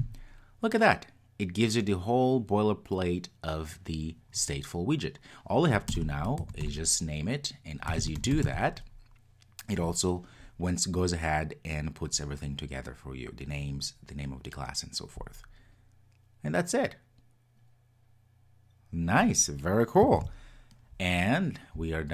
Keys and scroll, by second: 20.2 super+s.